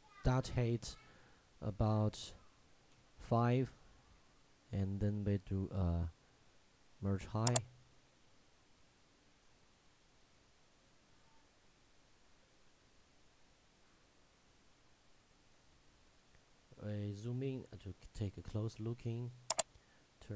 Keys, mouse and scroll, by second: 7.5 click, 14.5 shift+Num_Lock, 14.6 shift+scroll up 1, 15.5 shift+middle click, 16.4 shift+scroll up 1, 17.3-18.5 scroll up 1.